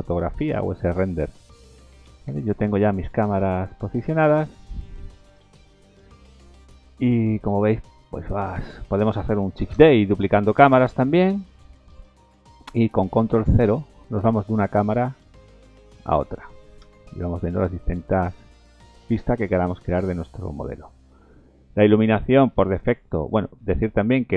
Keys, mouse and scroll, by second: 0.4-0.8 scroll down 2, 2.4 ctrl+z, 2.7 ctrl+z, 2.7-3.1 scroll down 3, 3.5 middle click, 3.9-4.2 scroll down 2, 5.4 Delete, 6.0 middle click, 6.4 scroll up 3, 6.7 middle click, 7.1-7.5 scroll down 4, 7.4 middle click, 8.7 click, 9.7 shift+d, 10.8 ctrl+z, 10.9 middle click, 11.7 click, 12.9 ctrl+KP_0, 14.2 middle click, 14.4-14.8 scroll down 5, 16.1 click, 16.8 ctrl+KP_0, 18.1-19.1 scroll down 5, 18.6 middle click, 19.2 middle click, 19.5-19.9 scroll down 4, 20.0 middle click, 20.4-20.9 scroll down 1, 21.7 click, 22.2 middle click.